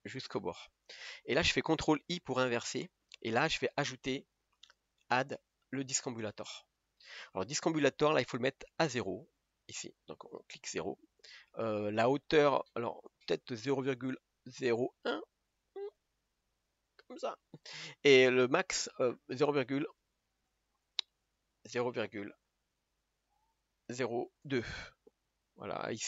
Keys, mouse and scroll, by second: 0.9-1.2 scroll down 3, 1.2-2.6 middle drag, 2.6 ctrl+i.